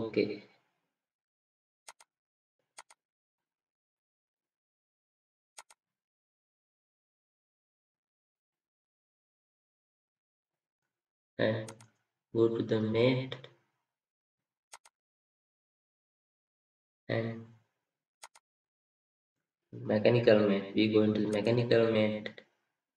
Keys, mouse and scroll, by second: 0.7-2.0 scroll up 1, 3.8 scroll down 1, 13.2-15.3 scroll up 1.